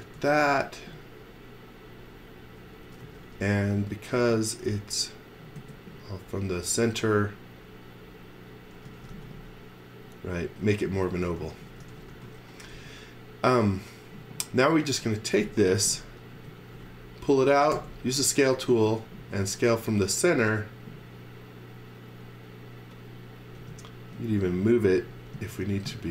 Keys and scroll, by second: 0.2 m, 3.0 v, 3.8 s, 8.6-9.6 typing, 11.2-12.7 typing, 13.8 b, 14.9-16.3 typing, 17.4 space, 17.7 s, 23.6 m.